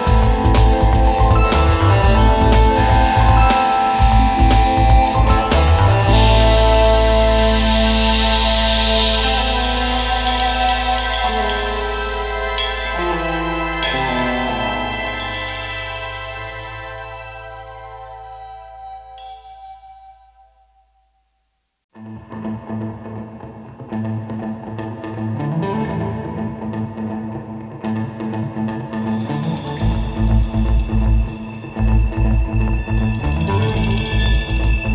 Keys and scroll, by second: 3.7 space, 5.0 space, 7.7 super+Tab, 11.5 space, 12.3 super+Tab, 12.6 super+Tab, 14.8 super+c, 15.1 super+v, 19.9 space, 22.1 super+z, 25.6 super+z, 26.8 super+z, 29.5 space, 29.9 space, 31.4 super+z, 31.8 space, 32.4 space, 32.6 space, 33.4 space, 34.3 super+z, 34.6 super+z.